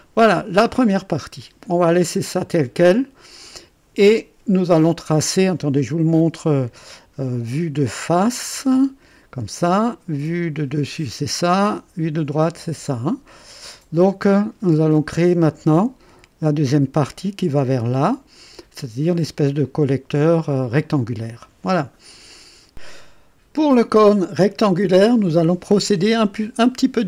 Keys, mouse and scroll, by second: 0.7 scroll down 2, 1.3-3.9 drag, 8.5 KP_1, 10.6 KP_2, 12.5 KP_1.